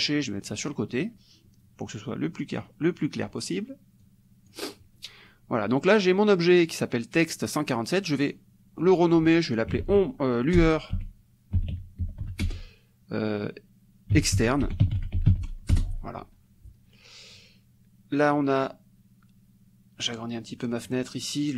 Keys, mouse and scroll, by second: 2.6 click, 4.0 click, 8.1 click, 9.8-12.6 typing, 14.1-15.8 typing, 20.2 click.